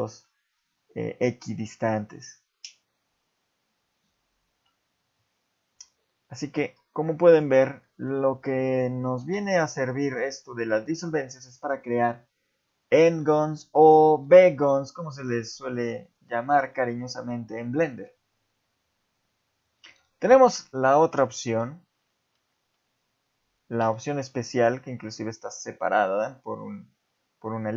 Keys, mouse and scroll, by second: 0.0 shift+middle click, 2.0-2.3 scroll down 3, 4.7-5.3 scroll up 1, 5.4 scroll up 2, 5.9 ctrl+z, 6.8-7.7 scroll down 3, 7.3 click, 7.8 shift+middle click, 9.2 x, 11.5 click, 12.8 alt+click, 13.6 shift+middle click, 14.6 click, 16.0 alt+click, 16.7 shift+middle click, 19.8 Tab, 21.5 x, 22.8 Tab, 23.8 x.